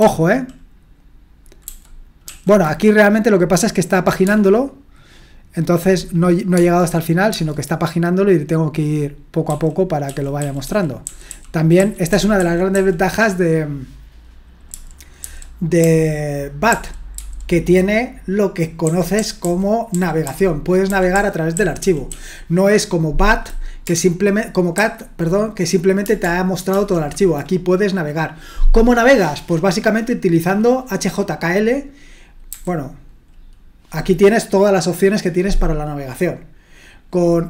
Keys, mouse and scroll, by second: 0.0 ctrl+shift+Right, 1.7 ctrl+shift+Left, 2.3 ctrl+shift+Right, 4.2 space, 6.5-7.3 typing, 9.4-12.7 typing, 14.7-16.7 typing, 18.8-19.9 typing, 21.3-22.6 typing, 24.8 ctrl+shift+Left, 26.7 ctrl+shift+Right, 32.5 h.